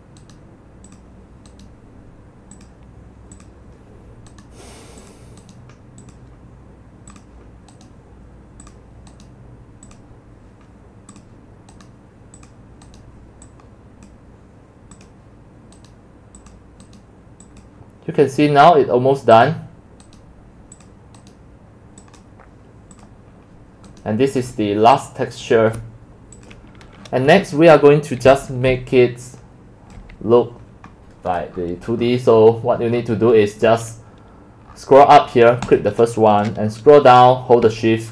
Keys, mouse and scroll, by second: 0.3 click, 0.4-1.0 right drag, 1.0-1.6 drag, 3.5-4.5 drag, 4.5-5.2 right drag, 5.2 click, 5.6-6.2 right drag, 6.9-7.9 drag, 7.9-10.0 right drag, 10.0 click, 10.1 right drag, 10.3-11.3 drag, 11.9-12.5 right drag, 13.2-14.1 right drag, 14.1-15.9 drag, 15.9-16.6 right drag, 16.6-16.9 drag, 16.9-17.6 right drag, 17.6-19.9 drag, 19.9-22.0 right drag, 23.1 click, 23.4 click, 23.4 click, 24.0-25.0 right drag, 25.5 right click, 26.3 click, 27.1-28.1 scroll down 15, 28.0-30.4 typing, 30.0-31.5 drag, 31.5-32.5 scroll down 19, 32.5-33.0 scroll up 16, 33.0-33.3 scroll down 7, 33.3 scroll up 9, 33.5 scroll, 34.7-35.0 scroll, 35.8-36.7 drag, 36.7-38.1 scroll down 21.